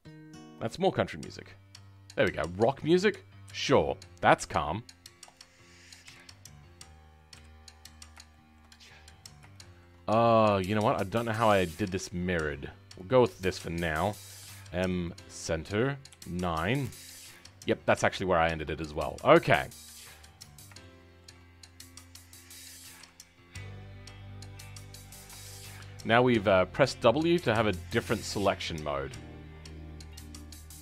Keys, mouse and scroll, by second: 1.9 scroll down 2, 6.0 KP_1, 6.7-7.3 scroll down 2, 7.3 KP_3, 7.8 scroll down 4, 8.2 shift+middle click, 8.7-9.5 scroll up 11, 9.5-10.7 shift+middle drag, 10.7-12.9 scroll up 2, 12.9 click, 16.0 KP_9, 17.7-20.4 scroll down 2, 20.4 click, 20.7 shift+middle click, 21.5-21.8 scroll up 2, 22.9 w, 23.5-25.4 drag, 25.4-26.7 shift+middle drag, 26.7-28.4 shift+drag, 28.4-29.7 shift+middle drag, 29.7-30.8 shift+drag.